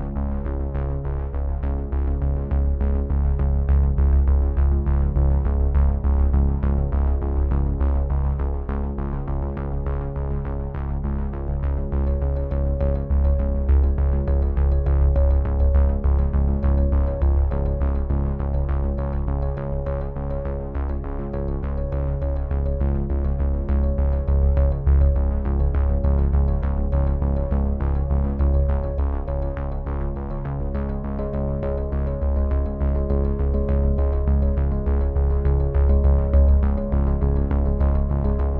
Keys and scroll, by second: 12.7 z, 15.8 v, 24.3 space, 25.2 ctrl+n, 27.2 ctrl+v.